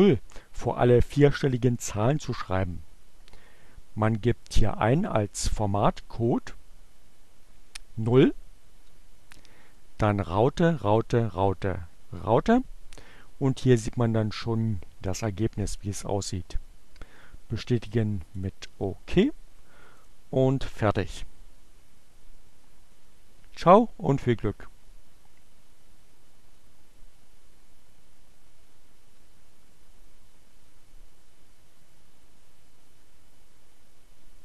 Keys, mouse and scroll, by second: 3.5 click, 7.5 0, 16.3-17.7 drag, 18.8 click.